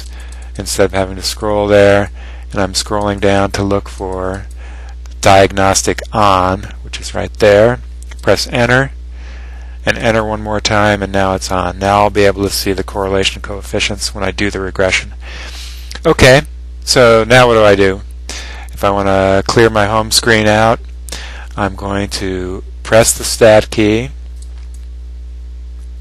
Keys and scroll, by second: 0.7 Down, 1.4 Down, 1.9 Down, 2.5 Down, 3.2 Down, 3.5 Down, 3.8 Down, 4.2 Down, 4.7 Down, 6.5 Up, 8.4 Return, 10.2 Return.